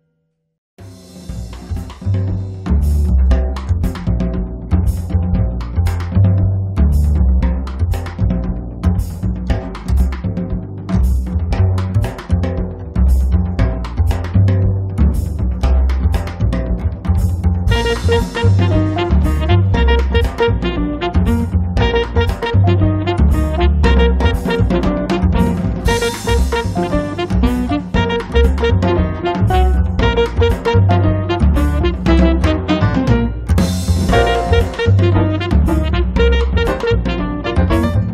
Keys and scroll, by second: 5.3 space, 5.8 Escape, 10.6 space, 16.2 l, 18.9 p, 19.9-21.8 typing, 23.0 space, 27.5 space, 30.8 space, 33.6 space, 34.1 Escape.